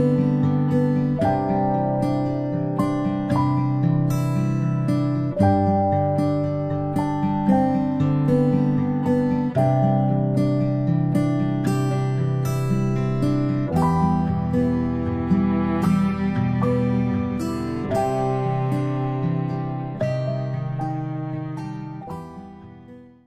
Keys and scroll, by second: 0.5-3.5 typing.